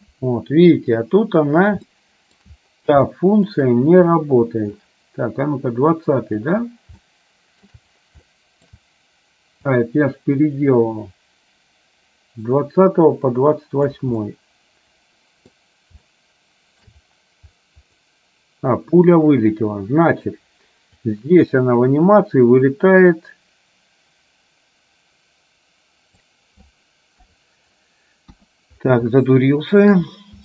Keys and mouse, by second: 2.1 shift+middle click, 3.2 shift+middle click, 4.8-6.6 drag, 7.1 shift+click, 7.2 shift+middle click, 8.5 shift+middle click, 9.8-14.1 drag, 14.3-15.6 middle drag, 16.2 shift+middle click, 18.1-19.7 middle drag, 21.2-26.5 drag, 27.3 KP_3, 28.3 KP_1, 29.5 shift+middle click.